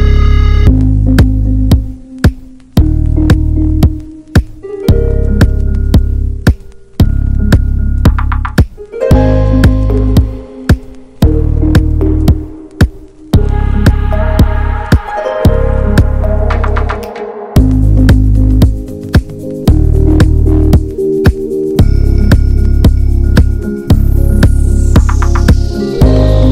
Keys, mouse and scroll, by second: 0.8 scroll down 1, 1.0 middle click, 1.4 scroll down 1, 1.6 shift+middle click, 2.0 scroll up 2, 2.3 middle click, 2.5 scroll down 1, 3.4-4.6 right drag, 4.6-6.5 drag, 6.5 middle click, 7.3 f, 8.0 middle click, 8.4-9.4 drag, 9.4 middle click, 9.9 ctrl+z, 11.8 scroll down 1, 12.0 middle click, 12.2 scroll up 1, 12.3 shift+middle click, 12.8-13.8 drag, 13.8 middle click, 14.4 click, 15.2-16.5 middle drag, 16.5 right click, 17.0 middle click, 17.5-19.4 drag, 19.4-20.4 middle drag, 20.4 ctrl+z, 21.9 right click, 22.7-24.6 drag, 24.6 scroll down 2, 24.8 middle click, 25.4 click, 26.2 middle click.